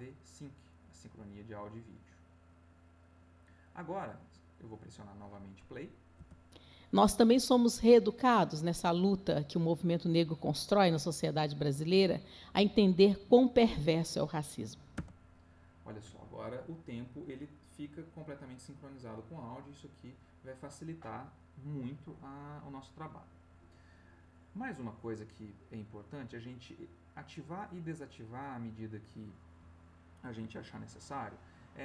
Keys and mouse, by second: 1.3 click, 6.1 space, 14.9 space, 26.3 click.